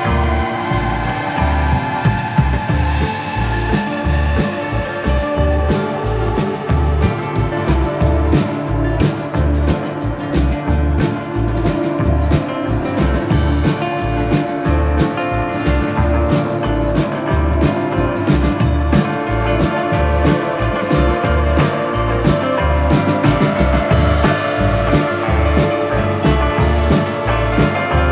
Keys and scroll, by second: 17.1 ctrl+z, 21.8 Delete.